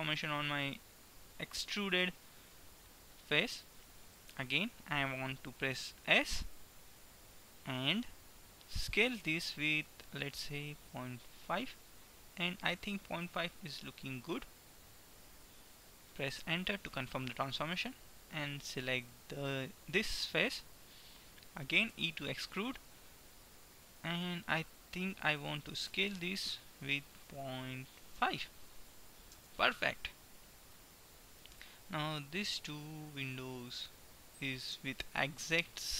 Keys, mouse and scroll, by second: 4.2 KP_3, 6.2 s, 17.7-20.6 middle drag, 22.1 e, 30.6-35.9 middle drag, 32.1-34.9 right drag.